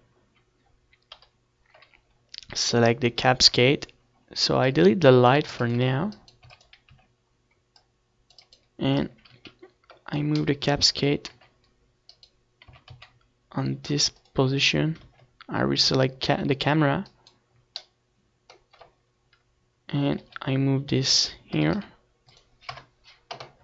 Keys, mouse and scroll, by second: 1.9 KP_7, 2.6 z, 4.0 right click, 4.8 x, 5.7 x, 6.1 c, 8.3 z, 8.5 KP_3, 10.4 r, 11.9 r, 13.4-15.1 drag, 14.1 KP_0, 17.0-19.2 middle drag, 19.2 g, 20.3-23.0 drag, 20.6 r, 21.7 KP_0, 22.8 g.